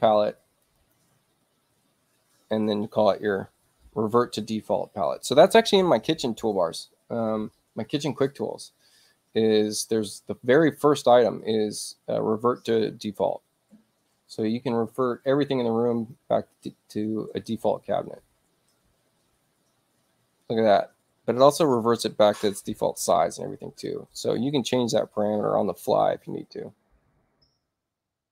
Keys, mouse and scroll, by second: 0.4 click, 0.8 click, 7.8 click, 10.7 click, 15.1 click, 16.0 click, 26.1 ctrl+z.